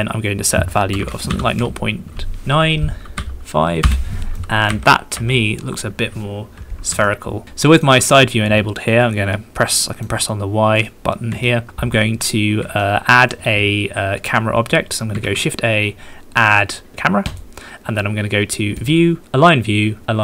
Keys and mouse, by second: 0.9 KP_0, 1.0 KP_Decimal, 1.3 KP_9, 3.2 KP_5, 3.9 Return, 4.4 click, 5.2 KP_1, 7.2 shift+click, 7.4 shift+middle drag, 7.7 shift+click, 8.9 click, 9.9 middle click, 11.5 shift+drag, 13.0 shift+click, 15.2 shift+a, 18.9-20.2 drag.